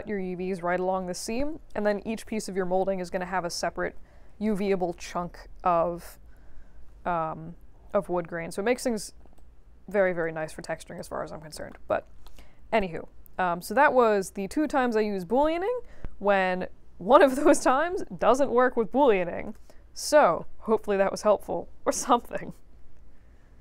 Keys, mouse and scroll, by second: 8.9 scroll up 2, 9.3-9.9 alt+drag, 10.2 right click, 10.9 click, 11.7 middle click, 12.2 alt+middle click, 12.7-14.2 alt+drag.